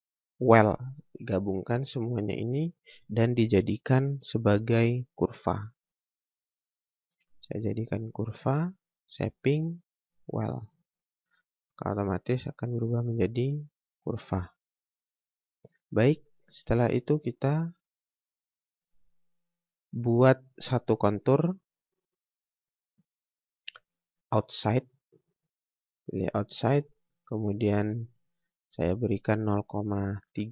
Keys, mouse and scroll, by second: 5.6 click, 10.2 click, 11.9 scroll up 1, 12.4 click, 15.8 scroll down 1, 16.0-16.6 scroll up 1, 16.6 click, 21.6 click, 24.8 click, 27.8 click.